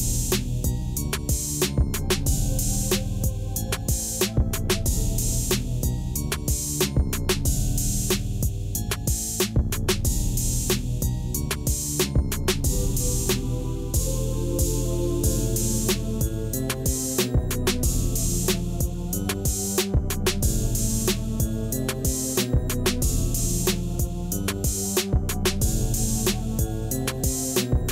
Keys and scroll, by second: 2.6 a, 5.0 Tab, 11.9 Tab, 13.7 shift+z, 18.0 3, 20.1 x, 23.2 Tab, 26.1 x, 26.9 shift+z.